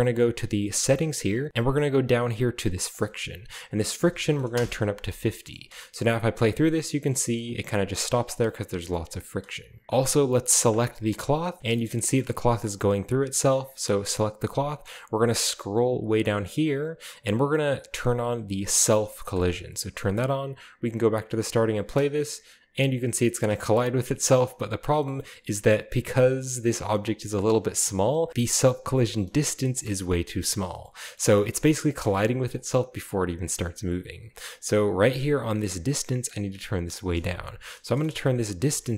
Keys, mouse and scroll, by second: 2.9 click, 4.1 typing, 4.6 Return, 5.4-6.4 middle drag, 5.5-6.4 scroll up 1, 5.6 space, 6.9 middle click, 7.4 middle click, 7.8 click, 9.1-9.8 middle drag, 9.1-9.8 scroll up 1, 9.3 space, 10.7 click, 10.9-11.3 right drag, 11.7-12.8 middle drag, 12.2 shift+scroll up 2, 13.1-14.6 scroll up 1, 14.8-15.9 scroll down 2, 15.9-18.0 scroll down 2, 19.4 click, 20.0 scroll down 1, 20.9-21.7 drag, 21.7-22.2 scroll down 1, 21.9 space, 23.3 space, 23.8-24.7 drag, 25.0 middle drag, 25.3 shift+click, 25.4-26.3 shift+scroll up 2, 25.5-26.3 shift+middle drag, 26.9-28.1 scroll down 1, 27.3 space, 28.3-28.7 shift+middle drag, 29.2 space, 29.8-30.2 drag, 30.8 shift+middle click, 31.2-32.0 shift+middle drag, 31.2-32.0 shift+scroll up 3, 32.6 click, 36.0 click, 36.9 click, 38.0 BackSpace, 38.1 BackSpace, 38.7 BackSpace, 38.8 BackSpace.